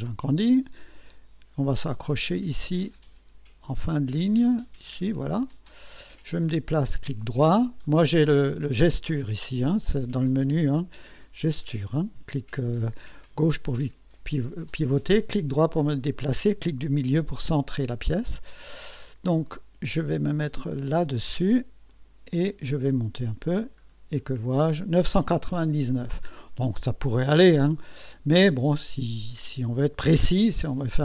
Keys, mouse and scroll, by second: 0.3 right click, 5.2 click, 6.5 right click, 7.2 right click, 7.8 right click, 10.3 click, 13.3 right click, 18.2-18.7 scroll up 2, 19.4 right click, 21.9 click, 23.3 click, 23.8-24.5 scroll down 2, 27.3 middle click, 28.5-29.4 right drag.